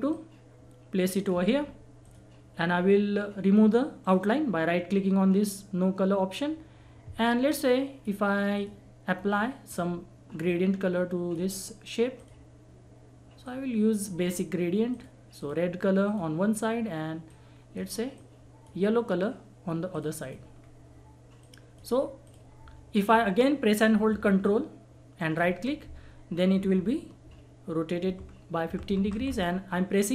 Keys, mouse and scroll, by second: 1.6-2.0 scroll up 1, 2.0 click, 4.0 right click, 7.4 click, 7.4 click, 9.1-9.6 scroll up 1, 9.6-19.9 drag, 20.5-21.0 scroll down 1, 21.4 click, 24.4 ctrl+click, 25.2 ctrl+right click, 28.1 ctrl+r.